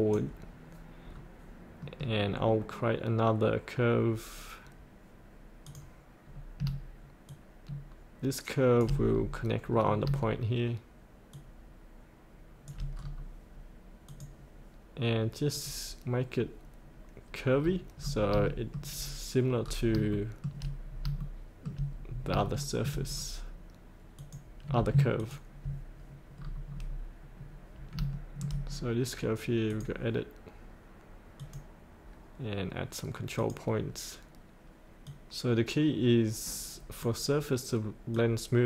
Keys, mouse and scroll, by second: 1.8 middle click, 5.6 click, 7.2 shift+click, 9.1-9.6 scroll up 1, 9.6-10.0 scroll down 1, 11.3 shift+click, 12.9-14.0 scroll up 1, 14.0 click, 17.6-18.4 scroll up 1, 18.5 shift+middle click, 19.6 scroll up 1, 20.0 shift+middle click, 20.8 scroll up 1, 21.2 shift+middle click, 22.0 scroll up 1, 22.4 shift+middle click, 23.1 scroll down 1, 24.1 click, 25.1 ctrl+click, 26.3-28.0 scroll down 1, 28.1 shift+middle click, 29.6-38.6 drag.